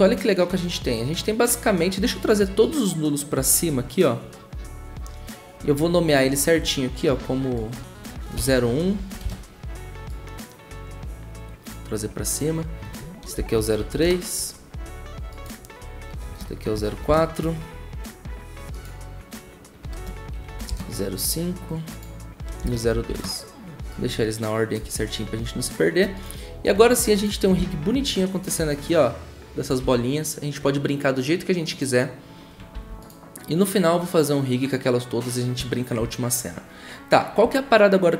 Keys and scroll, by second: 0.9 v, 8.4 Return, 8.7-9.6 typing, 13.3 Return, 13.5-14.4 typing, 16.2 Return, 16.7 0, 17.0 4, 17.0 Return, 19.9 Return, 20.6 typing, 22.6 Return, 22.7-23.5 typing, 27.5 s, 29.8 ctrl+z, 32.7 ctrl+a.